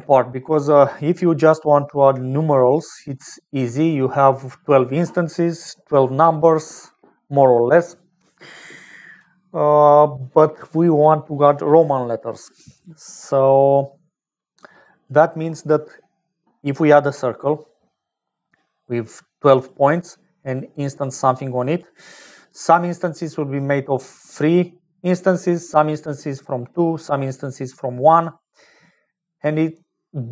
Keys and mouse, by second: 3.3 shift+middle click, 14.2 click, 17.1 d, 17.6 d, 17.7-19.6 drag, 19.6-28.8 typing, 20.7 click, 21.5 click, 23.6 click, 25.4 middle click, 26.1 click, 29.8 middle click.